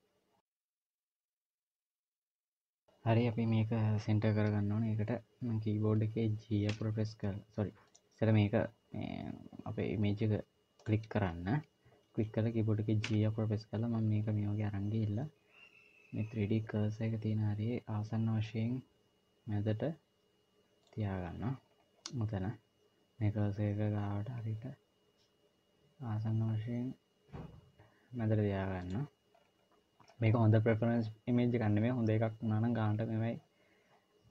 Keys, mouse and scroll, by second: 7.7 click, 10.6 click, 12.9 g, 21.5 scroll up 2, 23.7-24.5 scroll up 1, 23.7 g, 29.2-29.9 scroll down 2, 29.9-30.2 scroll down 2, 30.4-32.3 scroll down 1.